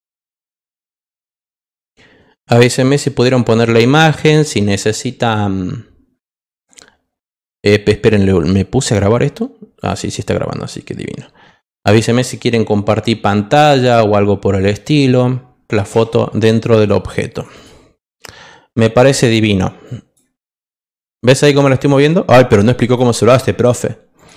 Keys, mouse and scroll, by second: 6.2 click, 8.9 click, 9.7 click, 13.7 click, 16.6 click, 17.3 click, 17.5 click, 19.8 click, 21.0 click, 21.7 click, 24.1 click.